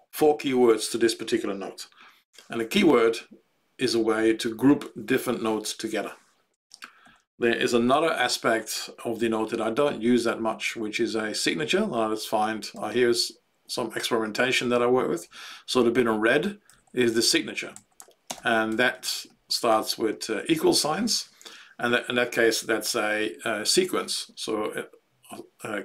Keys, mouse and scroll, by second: 7.0 Left, 7.9 ctrl+g, 9.6 Page_Down, 10.7 Page_Down, 11.2 Page_Down, 11.6 Page_Down, 13.0-15.0 Down, 15.2-16.3 Up, 16.6 Down, 16.8 Down, 17.1 ctrl+Right, 17.3 ctrl+Right, 17.7 ctrl+Left, 18.2 ctrl+space, 18.6 ctrl+Right, 18.9 ctrl+Right, 19.2 ctrl+Right, 19.7 ctrl+Right.